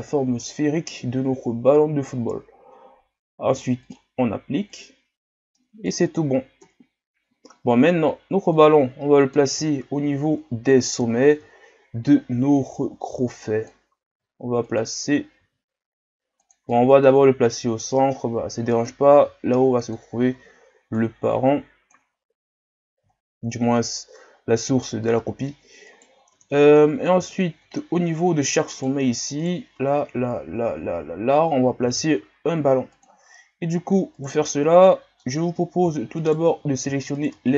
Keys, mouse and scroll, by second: 3.8-5.5 drag, 5.5-6.7 middle drag, 6.7 KP_Divide, 8.6-9.7 drag, 9.7 shift+scroll up 6, 10.4 scroll up 2, 11.1-12.0 shift+scroll up 10, 13.1 click, 14.0 s, 15.3 s, 16.7-17.9 middle drag, 17.9-19.1 drag, 19.1 s, 20.2 scroll up 4, 21.0-22.1 drag, 22.1 scroll down 1, 23.1 shift+scroll down 3, 24.1-25.9 shift+scroll down 1, 25.9 right click, 26.4 Tab, 26.8 middle click, 27.4 shift+scroll down 4, 28.0 scroll up 1, 28.8 right click, 29.4 right click, 31.8 ctrl+Tab, 34.1 right click, 34.5 middle click, 35.3 scroll up 1, 36.2-37.2 shift+right drag.